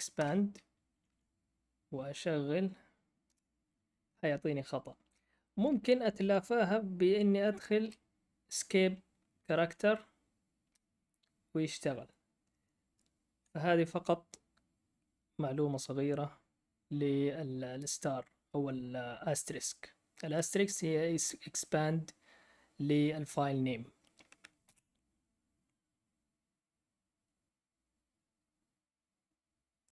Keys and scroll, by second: 0.1 Return, 3.2 Up, 3.2 Return, 5.5 Up, 5.5 Left, 5.6 Left, 6.1 Left, 7.8 \, 9.2 Right, 9.4 Right, 9.6 Right, 10.6 Return, 24.6 ctrl+l.